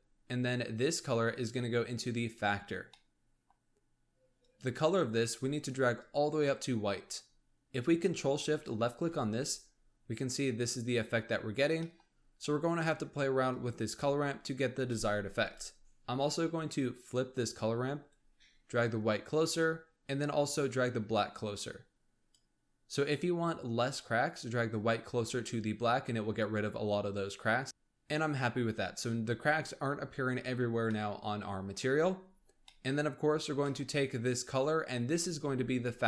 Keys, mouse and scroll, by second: 0.3-0.7 scroll up 3, 0.7 click, 2.8 middle click, 3.5-4.3 scroll up 1, 4.3 click, 8.4 ctrl+shift+click, 10.7-11.7 scroll up 1, 11.7 middle click, 12.0-13.4 scroll up 1, 13.4 click, 15.3-27.7 drag, 27.7-28.2 middle drag, 28.2 scroll up 3, 29.3-30.7 scroll down 2, 30.7 scroll down 2, 30.9-32.1 middle drag, 32.1-32.6 scroll down 8, 32.6-33.4 middle drag, 33.4 scroll down 1, 33.6-34.3 middle drag, 34.3 click.